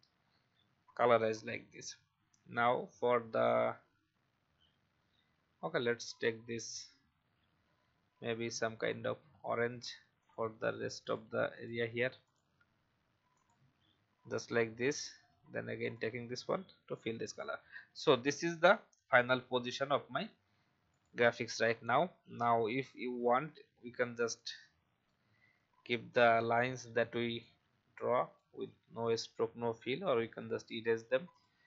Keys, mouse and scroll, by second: 0.1-1.0 scroll up 1, 1.3 alt+scroll down 1, 8.7 click, 14.3-14.6 alt+scroll up 1, 15.8 click, 17.9 alt+scroll down 1, 19.7 v, 20.3-20.9 alt+scroll down 1, 20.9-26.0 drag, 26.1 Delete, 27.4-29.0 drag, 29.4 Delete, 30.1 click.